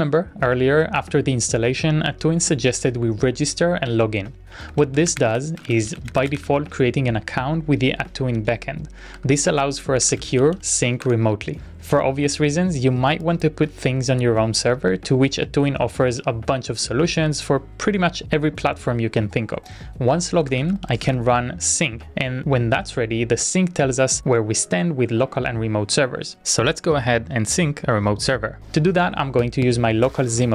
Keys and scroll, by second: 8.9-11.2 typing, 19.7-21.6 typing, 24.7-25.4 typing.